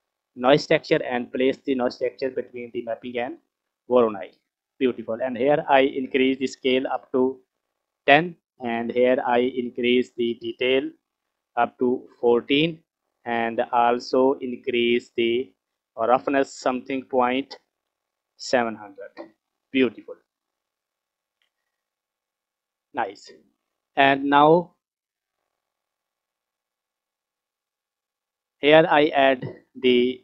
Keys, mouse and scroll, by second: 4.1-4.7 scroll up 5, 5.5-8.0 drag, 9.5-15.5 drag, 15.6-18.5 drag, 17.8 KP_0, 19.1-19.8 scroll up 5, 19.3 middle click, 19.8 middle click, 20.2-21.5 scroll down 6, 21.5 middle click, 22.2 scroll down 1, 22.2 middle click, 23.4-24.2 middle drag, 24.8-25.2 scroll up 3, 25.3 scroll down 2, 25.4 middle click, 26.2 click, 26.5-27.6 drag, 28.2 scroll down 2, 28.3 middle click.